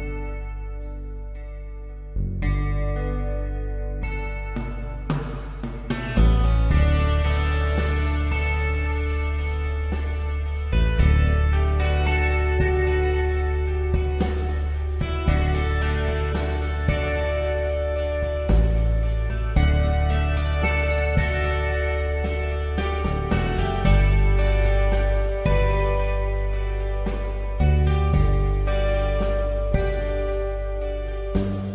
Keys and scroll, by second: 20.8 space, 22.5 b, 26.8 b, 28.0-29.9 typing, 31.2-31.7 typing.